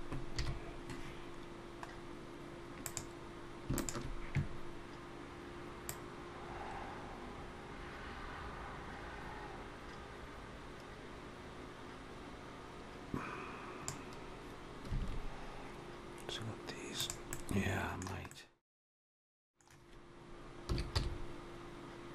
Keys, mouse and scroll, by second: 0.2 KP_1, 1.7 scroll up 2, 2.6 click, 3.6 shift+click, 5.7 click, 15.0 alt+a, 16.8 click, 17.1 middle click, 18.1 middle click, 20.5 s.